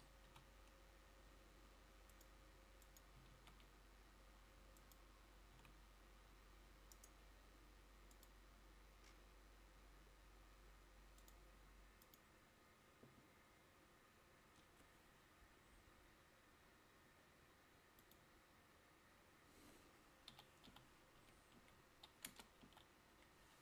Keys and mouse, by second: 0.4 a, 3.4 shift+a, 5.7 s.